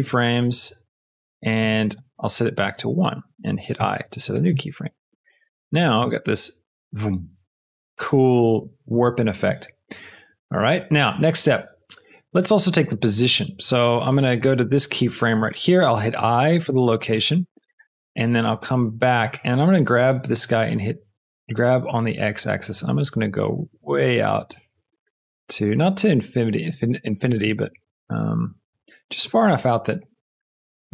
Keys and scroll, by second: 2.5 KP_1, 2.7 Return, 3.8 i, 6.0 space, 8.9 space, 20.3 g, 20.6 x, 27.2 g, 27.4 x, 28.7 Escape.